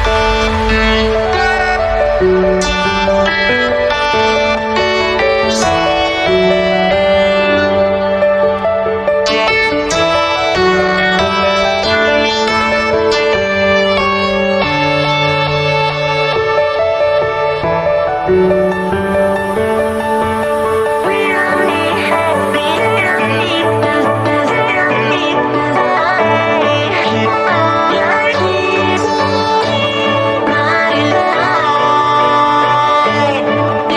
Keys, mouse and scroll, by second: 1.5 ctrl+z, 1.7 click, 3.2 click, 4.3 space, 4.5 click, 4.5 space, 5.2 click, 7.4 ctrl+d, 8.1 click, 9.3 ctrl+z, 12.3-15.5 drag, 15.5 ctrl+z, 18.3 b, 19.2 click, 23.2 ctrl+z, 25.1 ctrl+d, 25.7 click, 27.3-33.9 drag.